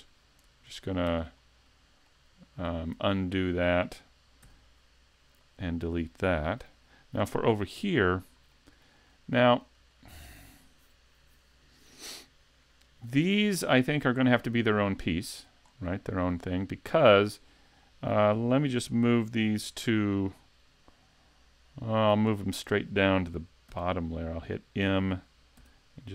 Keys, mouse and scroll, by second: 1.4 middle click, 3.0 super+z, 4.4 x, 7.9 click, 8.5 shift+middle click, 9.1 middle click, 9.9 shift+middle click, 14.1 right click, 15.2 shift+right click, 15.6-16.1 scroll up 2, 16.1 shift+middle click, 23.7 m, 25.6 m.